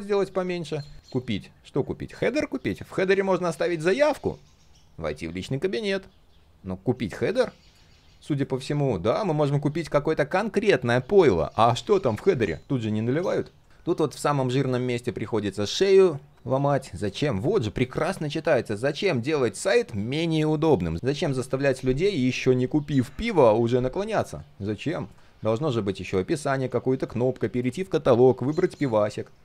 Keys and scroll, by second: 26.6 ctrl+z, 28.1 ctrl+z.